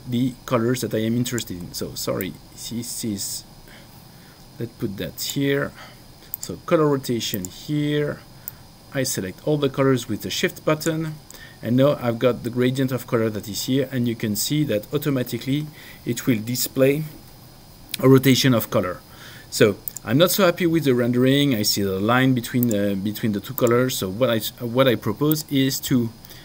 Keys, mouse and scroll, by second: 2.2 click.